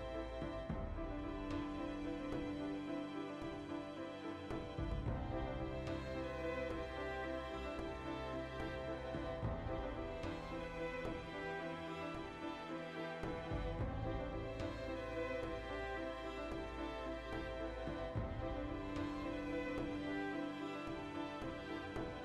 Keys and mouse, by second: 1.8 click, 2.5-2.9 ctrl+shift+middle drag, 2.9 right click, 3.1-4.5 ctrl+middle drag, 3.5 alt+q, 4.2 Tab, 4.5 right click, 4.9 g, 5.3 click, 5.4-6.8 ctrl+shift+middle drag, 6.3 g, 6.8 click, 7.7-10.8 shift+middle drag, 9.3 g, 11.1 ctrl+click, 11.6 ctrl+click, 11.9 shift+middle click, 12.4 g, 12.8 click, 13.4 a, 13.5 v, 14.5-22.2 shift+middle drag, 17.0 alt+q, 20.8 Tab.